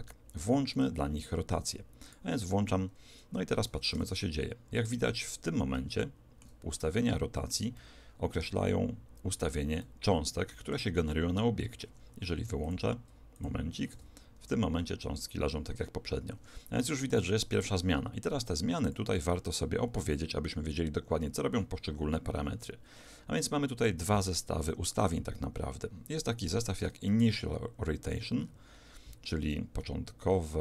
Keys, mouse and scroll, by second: 2.1 click, 4.0 alt+a, 6.0-11.7 middle drag, 11.9 Escape, 12.7-15.3 drag, 13.9 alt+a, 16.3 Escape, 17.1-21.4 drag, 27.1-30.0 middle drag.